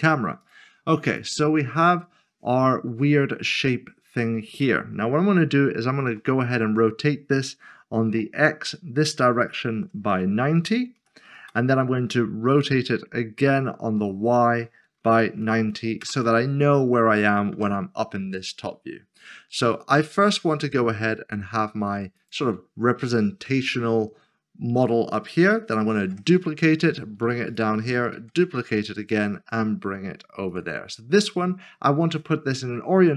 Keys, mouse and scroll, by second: 0.4 click, 1.7 click, 1.9 middle click, 6.1 typing, 8.1 typing, 9.6 typing, 10.9 typing, 11.4 Return, 12.6 typing, 13.9 typing, 15.0 typing, 17.7 typing, 19.7-20.5 typing, 22.2 click, 27.5 click, 28.1 typing, 30.5 click.